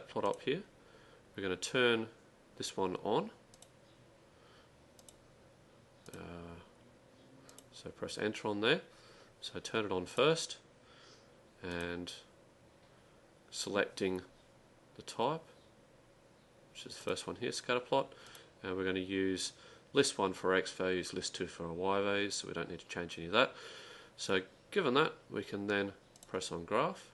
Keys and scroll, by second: 3.4-4.1 typing, 8.2-8.9 typing.